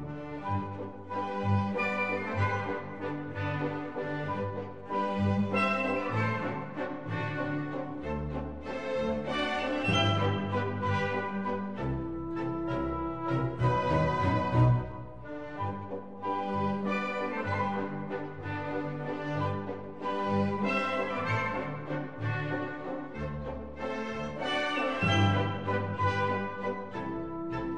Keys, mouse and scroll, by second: 1.9 k, 7.2-10.8 middle drag, 9.6 k, 17.9 k, 24.8-27.7 drag.